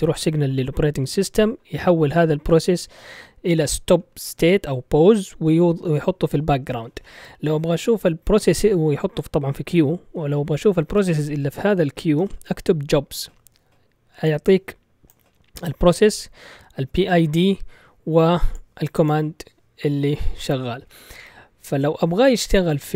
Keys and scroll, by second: 9.9-12.5 typing.